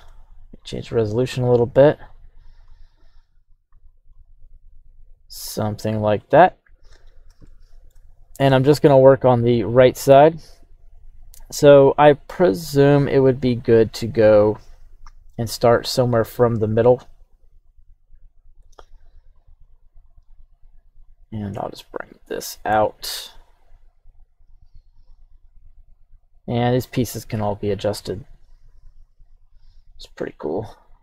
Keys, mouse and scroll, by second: 6.2 scroll up 1, 7.3 scroll up 1, 7.4-31.0 shift+middle drag.